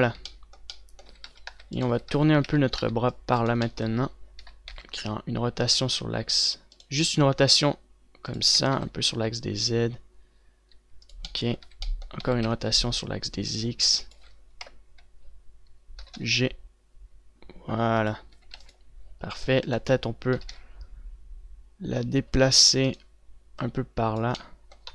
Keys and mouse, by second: 1.7-3.3 typing, 5.1 z, 5.4 r, 7.7 r, 9.2 r, 12.3 z, 13.0 r, 15.4 z, 15.4 KP_0, 16.8 g, 19.1 a, 19.3 ctrl+s, 21.2 g, 24.4 click.